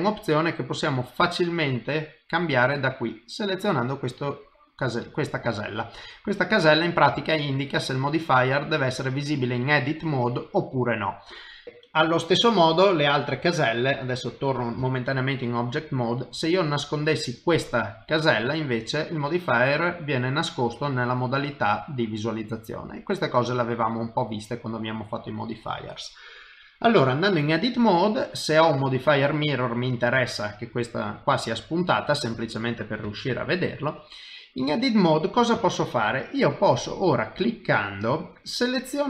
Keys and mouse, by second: 3.2 click, 6.5 click, 7.4 click, 12.6 click, 15.3 middle click, 17.2 click, 20.9 click, 26.4 click, 28.5 click, 30.8 middle click, 33.4 shift+middle click, 34.1 middle click, 35.6 shift+middle click, 37.6 click.